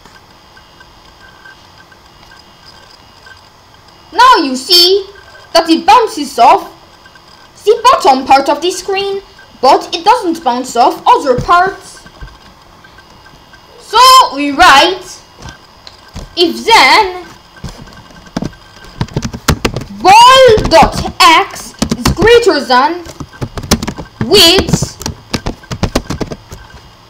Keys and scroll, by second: 18.4 Return, 18.8-21.8 typing, 23.2-26.3 typing, 26.0 Return.